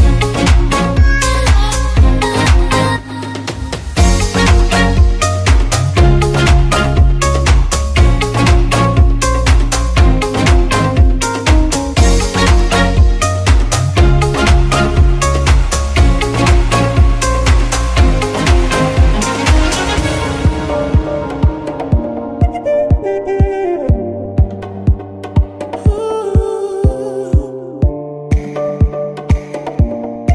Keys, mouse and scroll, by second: 0.7 shift+Right, 1.8 shift+middle drag, 2.0-2.6 scroll up 4, 2.4 alt+a, 2.6-3.1 middle drag, 3.1 z, 4.0 scroll down 2, 4.2-4.7 middle drag, 4.7 scroll up 2, 4.9 scroll down 2, 5.1-5.6 middle drag, 5.6-6.0 scroll up 2, 6.0-6.4 middle drag, 6.4 scroll up 2, 6.7-10.3 middle drag, 10.3-10.7 scroll up 2, 10.7-12.8 middle drag, 12.8 scroll up 2, 12.9-13.9 scroll down 2, 13.9 KP_1, 14.4-14.9 scroll down 2, 14.9-15.8 scroll up 2, 15.8-17.2 scroll up 1, 17.4-17.8 shift+middle drag, 17.8 z, 18.6 shift+Left, 19.3 scroll down 1, 19.5-19.9 shift+middle drag, 19.9 scroll up 1, 20.5 drag, 21.4-22.4 shift+middle drag, 22.4 alt+d, 23.7 click, 24.0 alt+d, 25.2 click, 25.5 alt+d, 26.6 click, 27.3 alt+d, 28.3 click, 28.5 alt+d, 29.3 click, 29.9 alt+d.